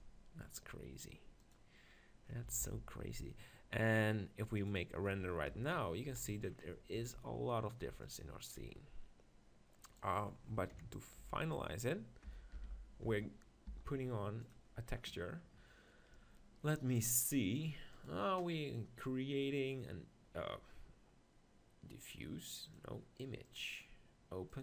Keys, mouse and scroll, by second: 0.4 middle click, 1.5-3.3 drag, 2.6 alt+d, 3.3 middle click, 4.7-6.5 drag, 5.5 KP_0, 6.1 z, 6.7-8.0 middle drag, 8.0-9.8 drag, 10.0 right click, 10.7 KP_7, 11.3 Tab, 12.6 ctrl+l, 13.7 u, 23.1-24.6 drag.